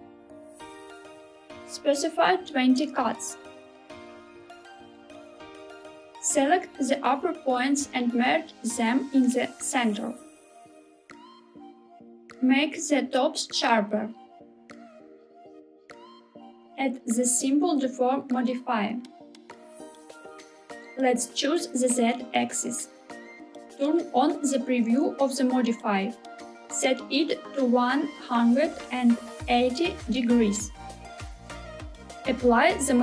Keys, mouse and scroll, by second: 0.8 click, 1.6 click, 2.7-5.2 drag, 5.5 KP_1, 6.0-7.8 drag, 10.5 m, 12.5 g, 14.0 z, 16.2 click, 16.8-20.3 drag, 20.7 click, 25.5 click, 26.8-31.6 drag, 32.5 Tab.